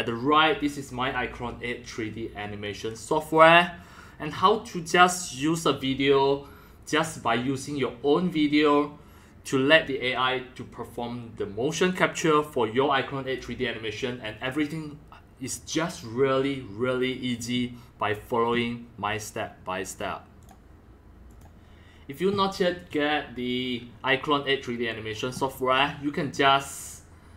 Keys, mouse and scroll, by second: 20.4 click, 20.5 click, 21.3 click, 23.6-26.5 drag.